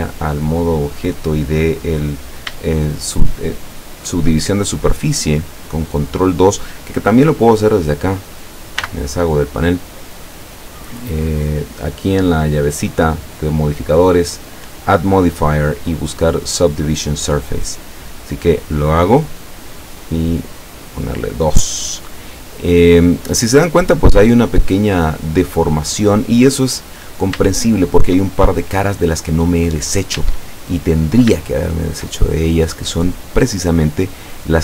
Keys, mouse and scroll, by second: 3.0 shift+middle click, 3.1 shift+scroll up 2, 3.4-4.5 shift+middle drag, 7.5 click, 8.9 n, 10.1 click, 11.3 click, 14.7 click, 18.5 click, 20.7 click, 21.7-23.2 middle drag, 23.5-25.4 middle drag, 25.8-26.8 middle drag, 26.8-27.2 scroll up 2, 27.6 shift+middle click, 28.3-29.1 shift+scroll up 1, 29.6 middle click, 30.2 Tab, 30.8-31.1 scroll up 1, 31.4-32.2 shift+middle drag, 32.8-33.8 middle drag, 34.3 right click.